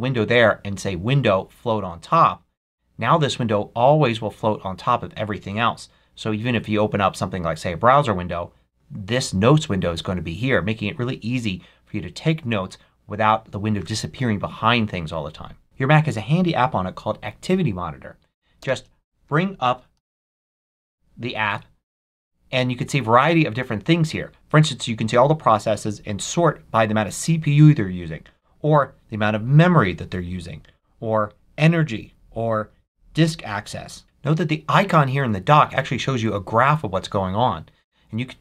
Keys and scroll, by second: 18.5 shift+super+space, 19.6-20.6 typing, 21.3 Return.